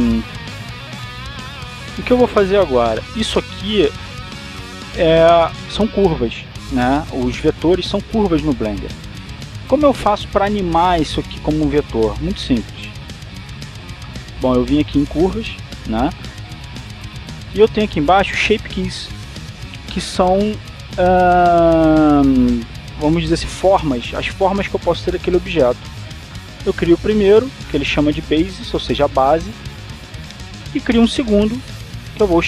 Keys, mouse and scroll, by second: 0.1-1.3 scroll up 1, 1.5-2.0 scroll up 1, 5.5 click, 13.9-15.4 scroll down 1, 27.6 click, 29.3-30.0 scroll down 1, 30.7-31.3 scroll down 2, 32.3 click.